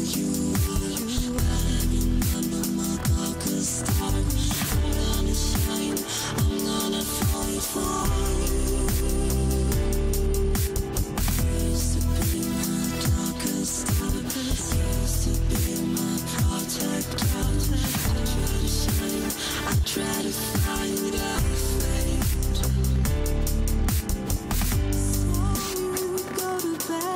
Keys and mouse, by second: 0.8 click, 3.4-4.6 drag, 8.4 shift+d, 14.4 click, 22.5 shift+d.